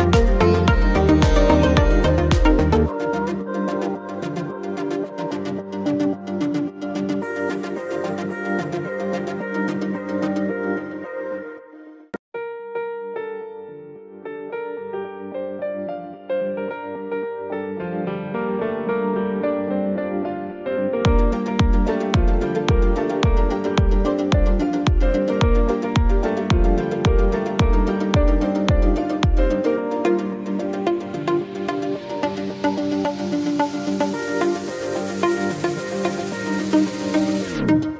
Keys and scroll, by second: 3.0 ctrl+a, 3.4 ctrl+t.